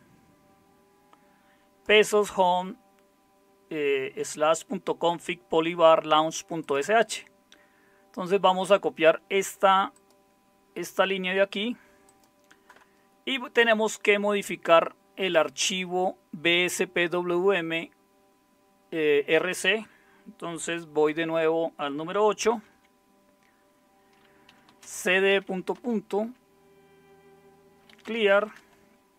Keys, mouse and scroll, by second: 22.5 super+8, 24.2-25.4 typing, 25.7 Return, 27.7-29.1 typing.